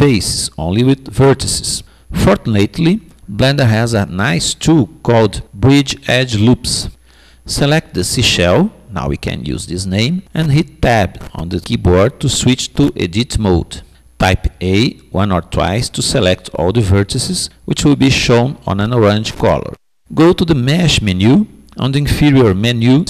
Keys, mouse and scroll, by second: 10.5 Tab, 13.9 a, 14.4 a, 22.5 click.